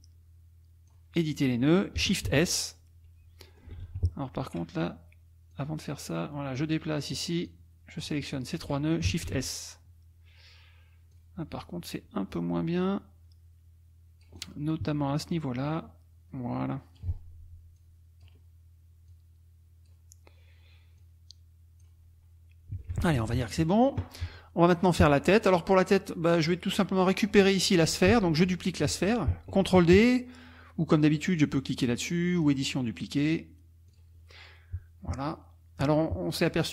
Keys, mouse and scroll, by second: 2.3 shift+s, 3.4 ctrl+click, 3.8 ctrl+z, 5.5-7.3 drag, 7.5 click, 8.3 shift+click, 9.3 shift+s, 11.1 click, 12.8-14.6 drag, 15.3-17.2 drag, 17.8 click, 19.1 click, 21.0 click, 22.9 F1, 23.3 KP_Subtract, 24.1 click, 25.3 click, 26.4 click, 26.8-27.2 scroll down 1, 32.4 click, 33.9 click.